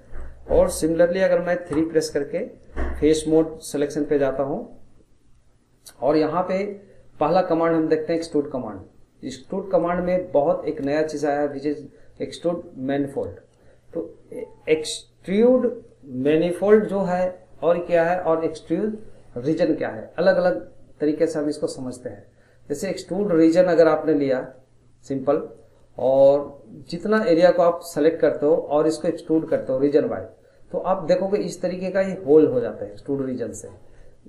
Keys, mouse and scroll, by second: 0.0-1.7 shift+middle drag, 1.7 3, 2.2-6.9 middle drag, 8.1-12.9 drag, 27.2 click, 27.9-29.0 middle drag, 29.0 click, 32.1 middle click, 32.5 scroll, 32.9-34.2 middle drag.